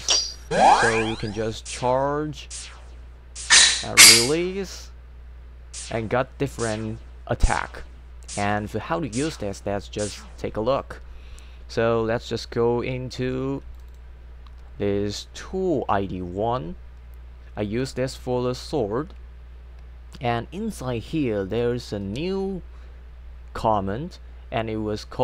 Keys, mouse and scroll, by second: 0.0 z, 10.8 click, 13.8 click, 13.9 click, 21.5 click, 22.0 space.